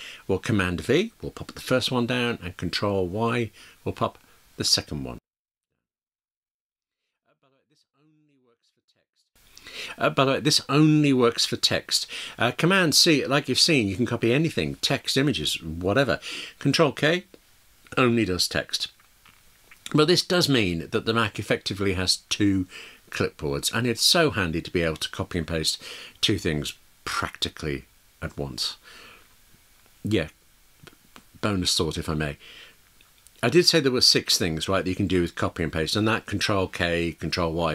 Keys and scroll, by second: 5.2 super+v, 6.8 super+v, 9.2 ctrl+y.